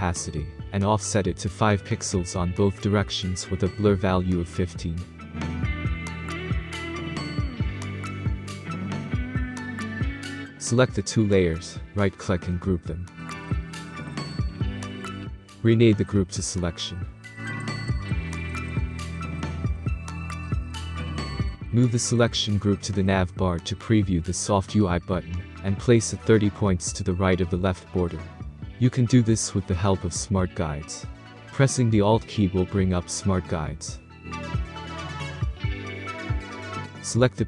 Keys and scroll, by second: 1.9-2.9 typing, 3.0 Tab, 5.2-5.7 typing, 5.5 Tab, 5.8 Tab, 6.8 1, 7.9 Return, 15.8-18.2 typing, 30.0 Down, 34.3 Down.